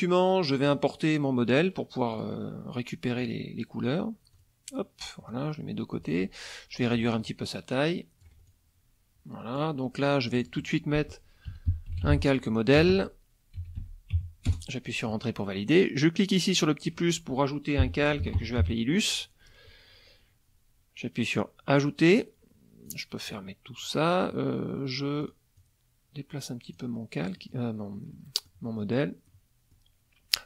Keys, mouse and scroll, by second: 0.7 click, 2.2 click, 3.2 click, 4.4 click, 5.3-6.3 drag, 7.1-8.4 ctrl+drag, 8.9-9.8 drag, 10.3 click, 11.2-14.6 typing, 16.5 click, 17.6-19.1 typing, 21.4 click, 22.9 click, 23.3 click, 25.2 click, 25.6-26.9 drag, 27.4 middle click, 28.1 middle click, 28.8 middle click, 29.3 middle click.